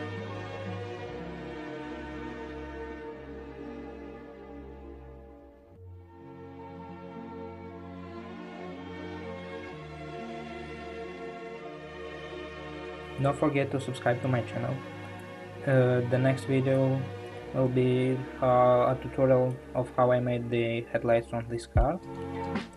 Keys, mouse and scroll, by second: 4.7 click, 5.3-22.7 middle drag.